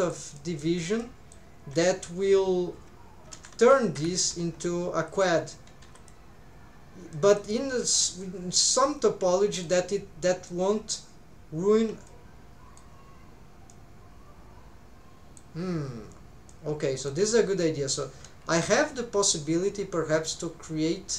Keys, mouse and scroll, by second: 0.4 middle click, 1.0 middle click, 3.3 ctrl+r, 5.1 click, 5.4-7.1 drag, 5.8 2, 7.1 middle click, 9.6 middle click, 12.1 shift+middle click, 13.7-15.4 middle drag, 16.5 middle click, 18.3 k.